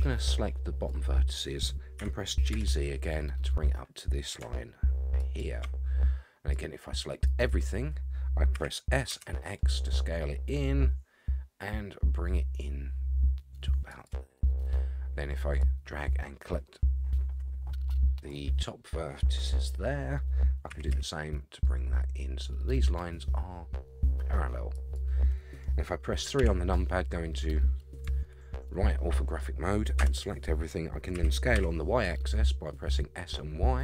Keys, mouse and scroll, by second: 2.0 g, 6.5 click, 8.5 s, 15.6-18.3 drag, 20.7 s, 26.4 KP_3, 28.2-29.4 shift+middle drag, 30.0 a, 31.1 s.